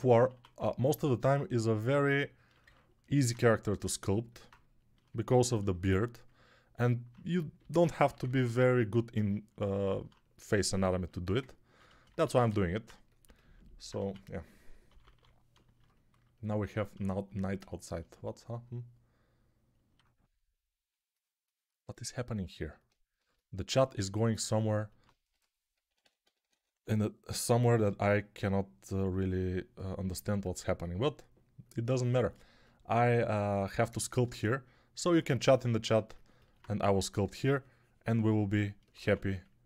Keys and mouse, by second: 0.2 1, 7.5 g, 8.0 [, 8.1 [, 12.1 ctrl+z, 13.8 1, 14.8 [, 14.9 [, 19.8-24.9 ctrl+drag, 19.8-24.9 ctrl+right drag, 25.2-26.4 typing, 36.7 3, 38.9 1.